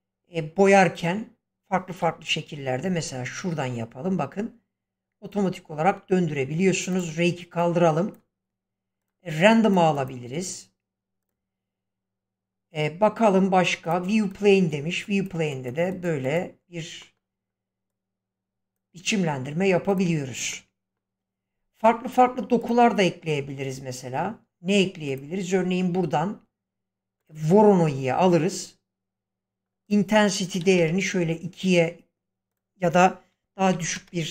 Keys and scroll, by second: 2.0 1, 30.6 2, 30.8 Return, 33.7 typing, 33.9 Return.